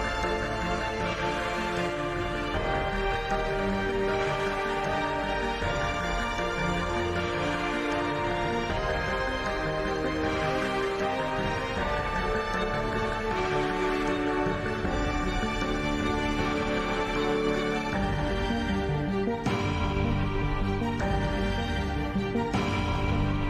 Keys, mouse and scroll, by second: 0.3 w, 0.6 click, 0.9 t, 1.4 t, 2.4-4.1 middle drag, 3.5 s, 4.3 s, 7.1 s, 9.9 KP_5, 10.0 KP_3, 10.7 middle click, 10.9 click, 11.6 g, 15.1 middle click, 15.3 KP_5, 15.4 KP_5, 15.6 KP_5, 17.0 Tab, 17.6 z, 18.4 z, 19.0 z, 19.3 z, 20.3 click, 20.6 middle click, 20.7 click, 21.4 z, 22.4 Tab, 22.7 z, 23.0 a, 23.4 s.